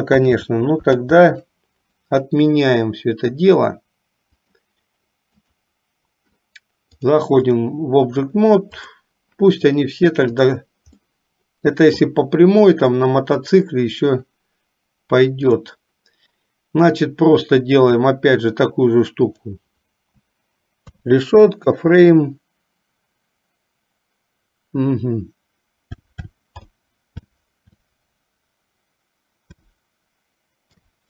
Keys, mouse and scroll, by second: 0.3 ctrl+z, 1.1 ctrl+z, 2.6 middle click, 4.4 click, 5.5 click, 7.1 click, 10.5 click, 11.1 middle click, 12.2 middle click, 13.5 click, 15.5 click, 19.5-31.0 drag.